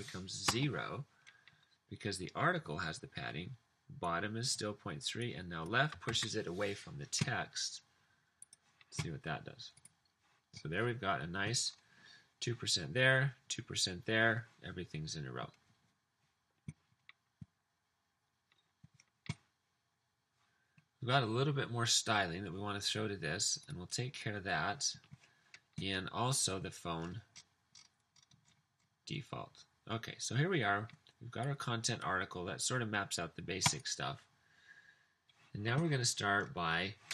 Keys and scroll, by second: 0.5 typing, 6.2 super+s.